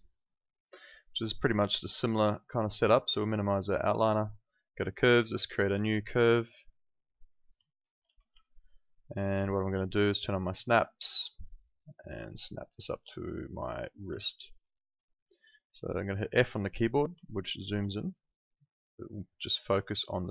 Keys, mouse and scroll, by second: 3.1 click, 7.6 alt+click, 8.0 w, 8.4 alt+middle click, 8.7 alt+right click, 9.1 alt+middle click, 11.2 click, 14.2 alt+middle click, 14.5 alt+right click, 16.3 f, 17.3 alt+right click, 18.5 click, 19.9 alt+click.